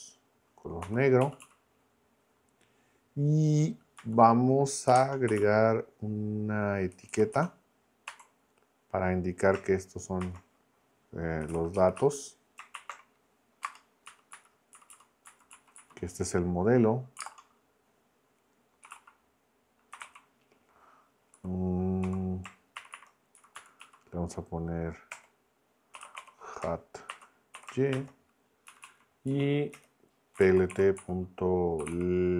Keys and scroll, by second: 0.8 k, 1.2 Right, 4.0 Left, 4.6-8.1 typing, 10.2-13.6 typing, 14.0 Up, 14.3 Left, 14.7 Up, 15.2 Left, 15.5 Down, 15.7 Left, 18.6-22.8 typing, 23.4 Left, 23.8 Right, 25.1-28.4 typing, 28.7 Right, 29.3 Down, 29.7 Return, 30.1-32.3 typing.